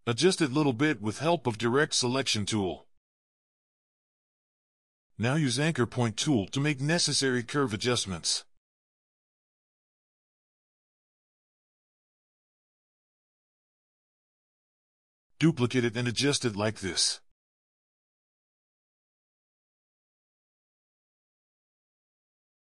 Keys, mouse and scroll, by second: 0.1 ctrl+scroll up 1, 0.3 alt+scroll down 2, 1.8 a, 4.5 ctrl+scroll down 1, 5.7 c, 6.6 shift+c, 8.8 a, 10.5 v, 11.1 shift+c, 13.3-15.1 typing, 13.9 double click, 14.3 double click, 15.3 double click, 16.2 alt+click, 20.2 double click, 21.2 alt+scroll up 2, 22.0-22.7 alt+scroll down 1.